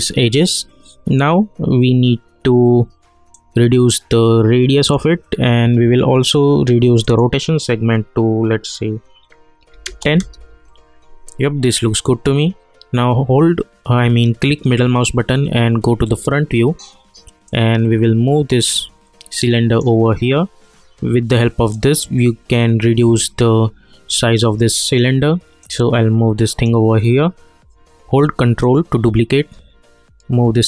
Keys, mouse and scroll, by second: 3.3-6.8 drag, 10.2 Return, 11.8-13.7 scroll up 1, 14.6 middle click, 17.5-28.6 drag, 28.6-30.6 ctrl+drag.